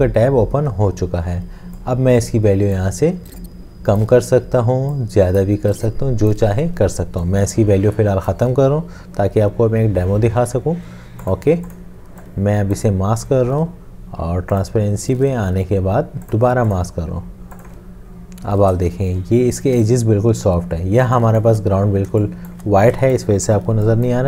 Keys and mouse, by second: 21.1 space.